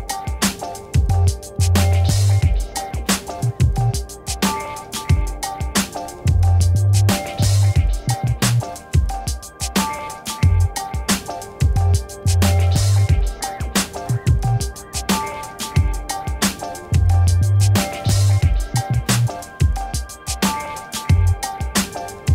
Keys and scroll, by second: 14.7 ctrl+w, 16.2 ctrl+t, 20.0 ctrl+z.